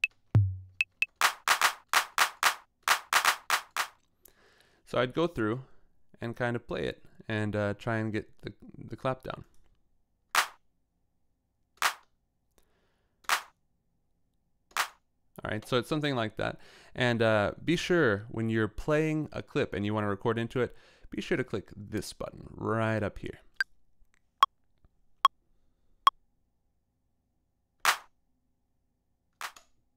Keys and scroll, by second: 0.0-1.7 typing, 10.3 e, 11.8 e, 13.3 e, 14.7 e, 15.5 space, 27.8 e, 29.4 e.